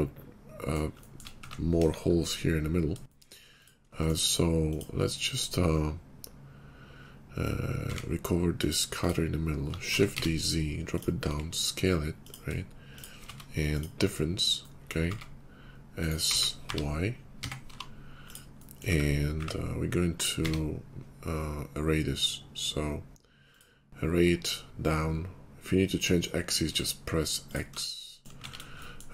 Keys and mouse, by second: 0.5-1.7 shift+drag, 1.7 KP_5, 2.9 shift+drag, 3.5 click, 3.5 right click, 7.8 q, 9.7 shift+d, 11.1 s, 12.8 shift+middle click, 13.2 q, 15.0 s, 16.0 middle click, 16.1-24.5 drag, 16.1 x, 17.3 s, 18.8 `, 19.4 `, 20.2 q, 24.5-29.1 middle drag, 28.5 shift+2.